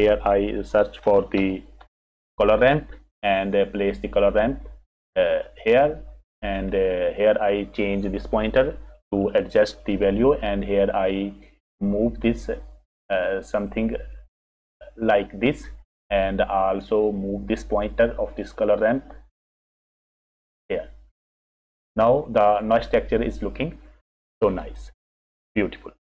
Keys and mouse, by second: 1.0 shift+a, 7.0 click, 8.9 click, 10.8-15.5 drag, 16.8 click, 19.0-20.8 middle drag, 24.9 click, 25.8-26.1 middle drag.